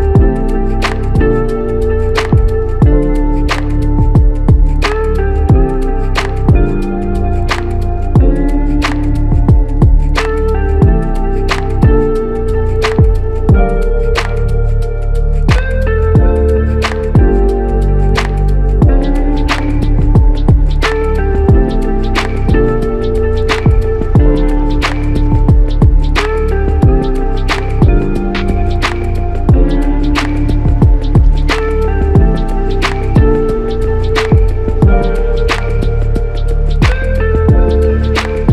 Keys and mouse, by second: 4.9-6.2 typing, 6.6 alt+click, 10.6 double click, 21.0 shift+click, 27.2 shift+click, 30.2-32.0 typing.